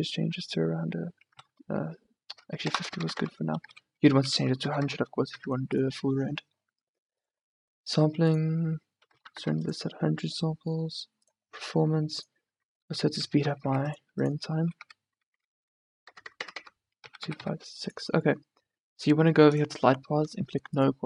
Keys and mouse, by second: 3.0 BackSpace, 4.9 BackSpace, 6.8 middle click, 7.3-8.4 drag, 9.5 KP_0, 16.5 BackSpace.